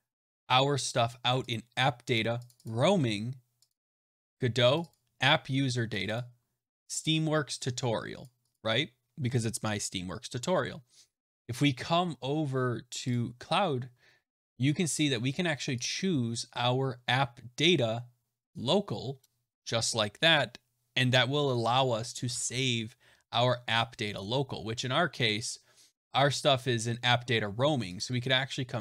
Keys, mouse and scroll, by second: 2.4 click, 2.6 click, 3.6 click, 3.7 click, 4.7 click, 4.8 click, 5.9 click, 6.1 click, 8.1 click, 8.4 click, 13.0 click, 15.8 click, 22.3 alt+Tab, 24.1 click, 27.9 click.